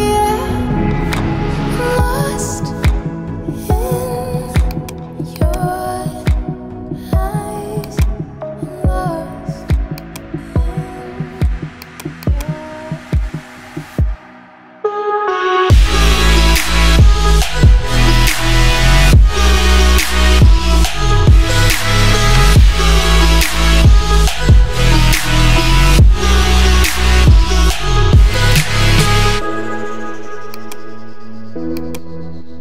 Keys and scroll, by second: 30.3 space.